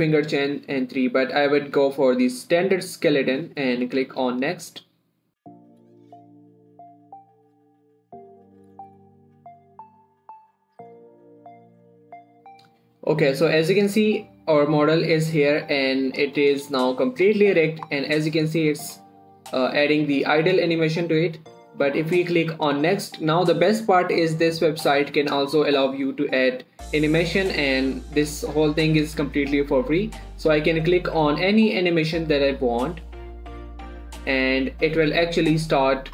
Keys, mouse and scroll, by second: 3.1 click, 3.1 typing, 14.2-17.2 drag, 17.2 scroll up 1, 17.4 click, 17.5 click, 17.9 scroll up 1, 18.5-21.7 drag, 20.3 typing, 26.7 scroll up 1, 26.7 typing, 34.1 click, 35.0 scroll down 1.